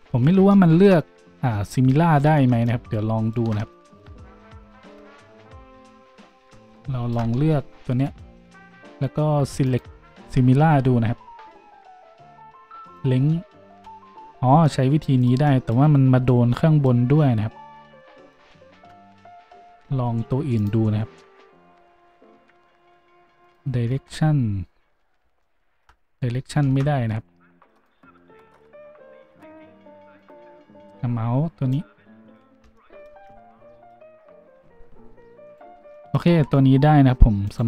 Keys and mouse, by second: 0.3-8.0 shift+middle drag, 0.3 shift+z, 2.5 shift+z, 8.0 click, 8.1-9.6 middle drag, 9.6-18.5 drag, 13.7 z, 18.7 ctrl+z, 19.4 z, 23.9 z, 26.6 ctrl+z, 26.7-29.6 drag, 35.1 g.